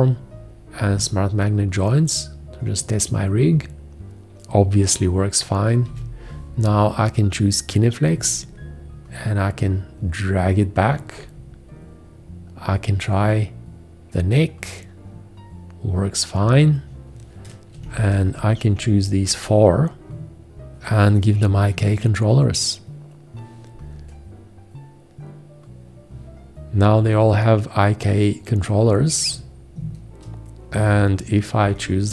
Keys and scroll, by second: 1.0 `, 5.8 g, 17.8 v, 31.6 g.